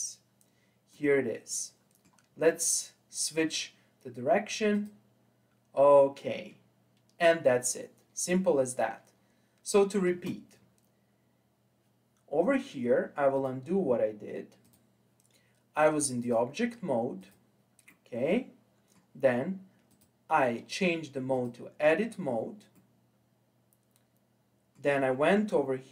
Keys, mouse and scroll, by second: 0.6 scroll down 2, 0.9-3.1 middle drag, 3.1-10.1 drag, 10.1 space, 13.4 click, 15.1-17.9 drag, 17.9-19.9 middle drag, 19.9-22.8 drag, 22.8-25.8 middle drag.